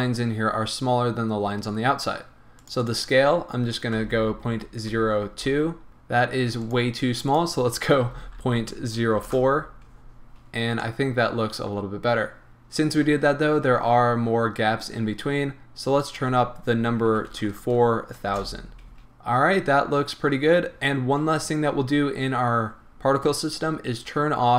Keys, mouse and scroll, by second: 0.6-2.7 scroll up 2, 2.7-10.9 drag, 5.9 Return, 9.3 Return, 10.3-10.9 scroll down 2, 10.9-16.0 middle drag, 11.9-13.6 scroll up 2, 13.6-16.0 scroll up 1, 16.0-19.0 drag, 17.5 KP_0, 18.4 Return, 19.0-24.5 middle drag, 21.0-23.8 scroll down 2, 23.8-24.5 scroll down 1.